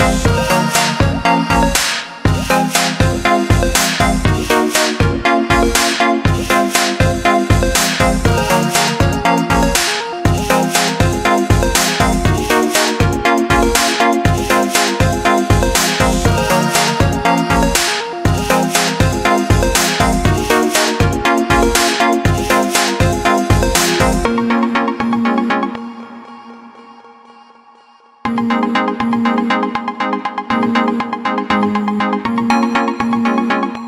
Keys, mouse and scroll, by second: 1.2 click, 9.5 shift+click, 14.8 click, 17.0 ctrl+z, 20.5 click, 30.0 BackSpace, 30.5 click.